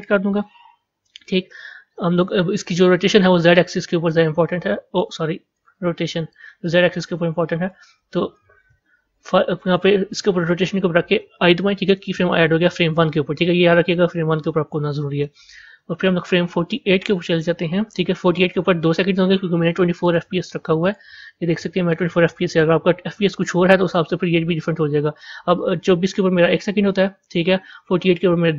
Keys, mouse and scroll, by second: 3.9-5.5 drag, 5.5 ctrl+z, 6.2-8.1 drag, 8.1 ctrl+z, 11.3 i, 15.4-18.4 drag, 19.9 click, 20.7 click, 25.5-28.5 drag.